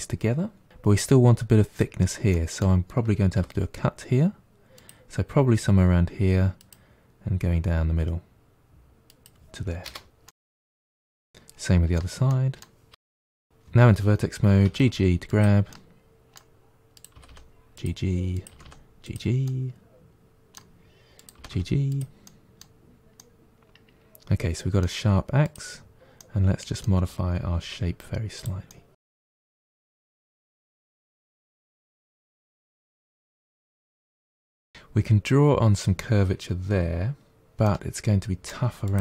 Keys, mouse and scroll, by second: 2.2-3.2 middle drag, 3.2 k, 10.1-11.5 middle drag, 11.5 k, 13.2 middle click, 13.5 click, 14.5 g, 15.6-16.9 middle drag, 16.9 click, 17.0 g, 18.2 click, 19.2 g, 19.3-21.1 middle drag, 21.1 click, 21.3 g, 22.1-25.3 middle drag, 25.3 click, 26.1-27.5 middle drag, 27.5 g, 28.6-29.8 middle drag, 29.8 click, 29.9 g, 30.3 middle click, 31.1 click, 31.7 middle click, 32.0 click, 33.0 click, 33.1 g, 33.5-34.8 middle drag, 37.5-38.7 middle drag, 38.7 click, 38.9 g.